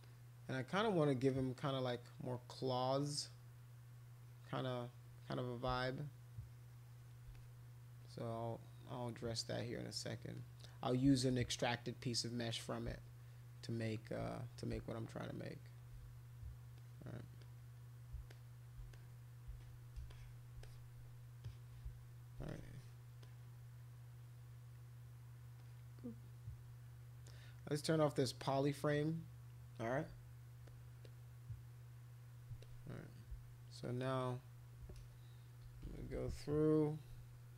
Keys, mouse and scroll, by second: 0.0 click, 1.6 click, 4.2 click, 4.6 click, 5.9-7.1 shift+drag, 7.3 click, 8.0 click, 8.9 click, 9.4 click, 10.4 click, 11.4 click, 12.5 click, 13.0 shift+click, 14.2 click, 14.9 shift+click, 16.8 click, 17.4 click, 18.3 ctrl+shift+click, 18.9 click, 20.1 alt+click, 20.6 alt+click, 21.4 click, 22.5 alt+click, 23.2 click, 25.6 click, 28.4 click, 31.0-32.3 drag, 32.6 alt+click, 33.8 shift+click, 35.7 [, 35.9 [, 36.0 [, 36.1 [.